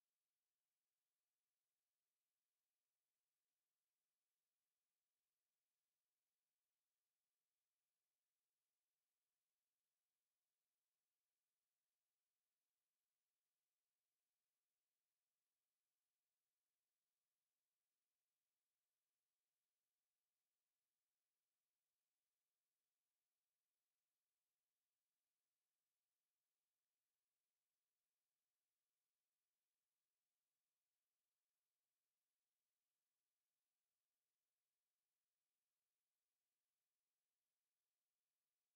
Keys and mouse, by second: 0.0 click, 2.6 ctrl+shift+h, 3.8 alt+click, 4.1 right click, 4.6 click, 6.3 alt+h, 7.0 alt+click, 7.6 alt+middle click, 8.1 alt+middle click, 10.9 alt+click, 11.4 alt+middle click, 12.0 alt+click, 12.5 alt+middle click, 12.8 alt+click, 13.6 alt+click, 13.9 right click, 15.3 click, 18.0 alt+click, 19.0 Delete, 21.1 alt+click, 21.8 alt+middle click, 22.2 right click, 22.2 right click, 24.1 click, 24.6 s, 25.4 w, 25.8 click, 27.5 ctrl+z, 27.7 click, 28.2 click, 29.8 alt+click, 30.6 alt+middle click, 31.0 alt+click, 31.3 right click, 34.0 alt+middle click, 34.8 right click, 35.6 alt+middle click, 36.4 click, 37.0 alt+click, 38.0 shift+click.